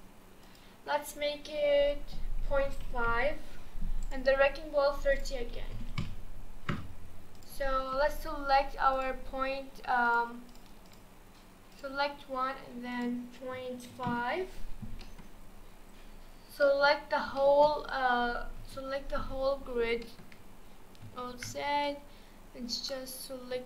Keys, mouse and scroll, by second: 0.4-3.5 drag, 4.0 click, 5.1-7.5 drag, 8.9 click, 10.1 click, 10.5 click, 10.9 click, 11.7 click, 12.9-15.0 drag, 15.0-17.0 middle drag, 17.0-17.4 scroll up 2, 17.4-18.6 shift+middle drag, 18.6 KP_1, 19.1-19.9 scroll up 4, 19.9 shift+scroll down 1, 20.0-21.3 shift+middle drag, 21.3 alt+z, 21.8 drag.